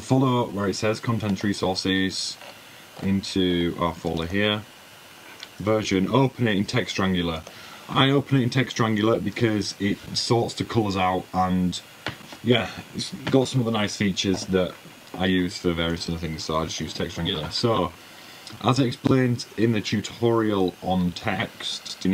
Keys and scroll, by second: 21.0 typing.